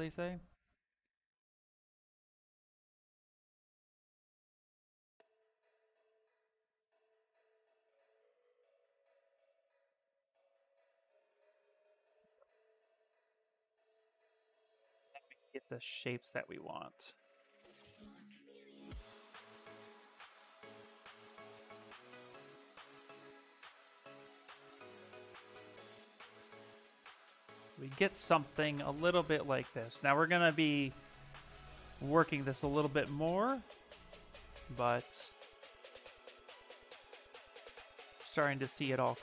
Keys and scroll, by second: 6.7 s, 8.8 s, 30.6 s, 36.4 s.